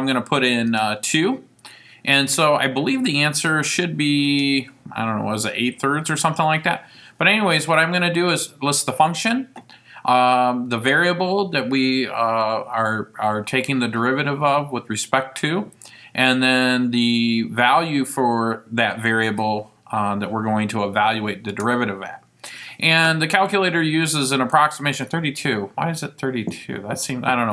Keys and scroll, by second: 0.8 2, 4.4 ), 21.7 Return.